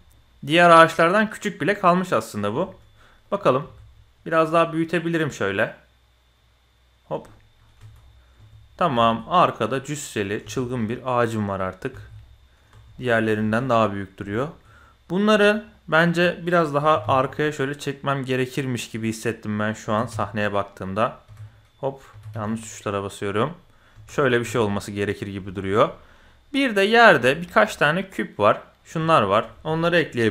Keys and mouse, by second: 2.5 KP_1, 3.6 s, 7.2-7.6 drag, 7.7 Tab, 8.0 click, 8.3 Tab, 9.0 shift+click, 9.2 click, 10.4 Tab, 10.7 click, 11.9 alt+a, 12.2-12.6 drag, 12.7 Tab, 12.9 drag, 13.4 shift+click, 14.3 shift+click, 16.2 click, 16.8 g, 18.8 click, 19.8 f, 20.1 y, 21.3 f, 22.1 g, 23.4 click, 23.9 Tab, 24.4 Tab, 25.5 shift+drag, 26.0 shift+click, 26.6 shift+click, 27.3 shift+drag, 29.1 shift+click.